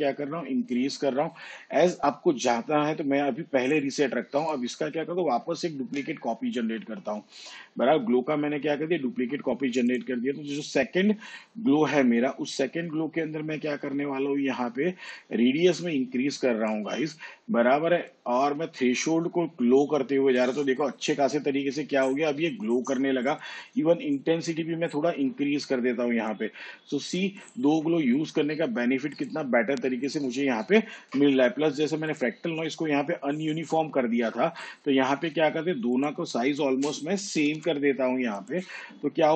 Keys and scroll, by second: 6.1 ctrl+d, 37.3 4, 37.8 0.